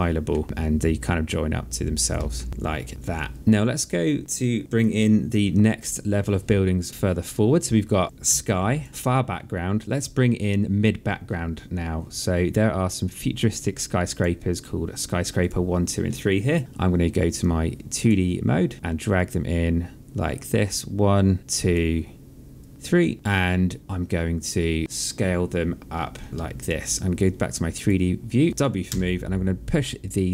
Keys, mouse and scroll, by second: 0.3 ctrl+d, 0.4 click, 2.1 alt+middle click, 2.5 alt+click, 13.9 click, 15.2 click, 17.8 click, 18.9 click, 21.4 click, 23.8 click, 24.7 alt+middle click, 27.5 click, 28.6 w, 29.8 click.